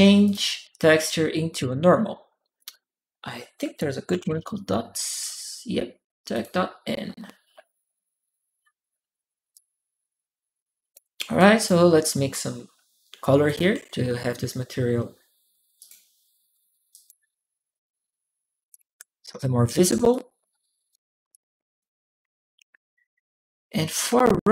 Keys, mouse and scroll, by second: 0.0 click, 1.3 click, 2.4 click, 3.6-4.6 typing, 6.1 click, 9.3-10.7 drag, 11.2 right click, 13.1 3, 13.3 click, 15.6 click, 16.7 click, 18.5 click, 19.9 click, 21.1 click, 23.9 1, 23.9 click.